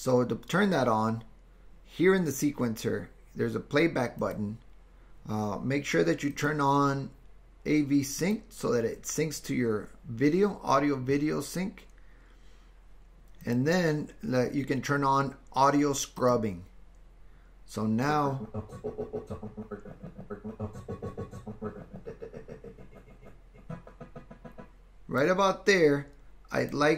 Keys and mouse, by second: 4.2-8.8 drag, 13.5-16.9 drag, 18.2-25.3 drag.